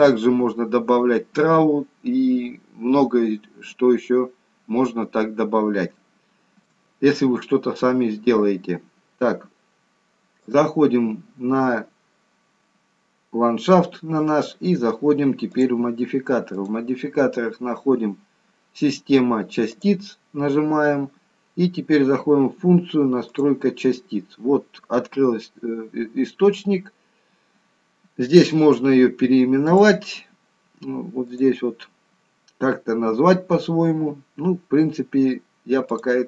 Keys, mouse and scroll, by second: 4.3-4.8 scroll up 2, 4.8-5.9 scroll down 2, 6.0 shift+middle click, 10.4 click, 15.5 click, 16.5 click, 23.3 click, 29.7 click, 31.3 click.